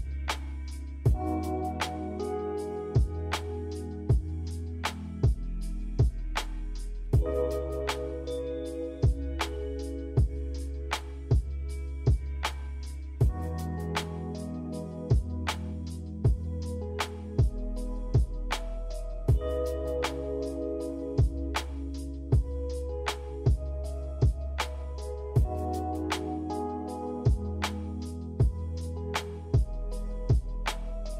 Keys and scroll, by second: 0.6 Delete, 2.4 z, 7.1 v, 12.1 a, 13.3 Delete, 16.7 z, 24.5 z.